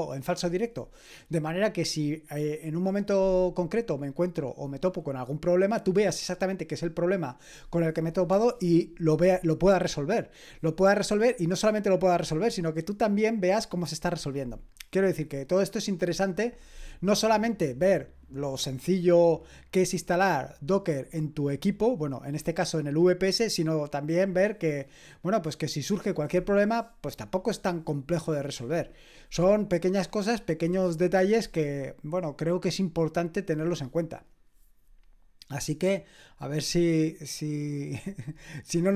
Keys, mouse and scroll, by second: 25.5 click.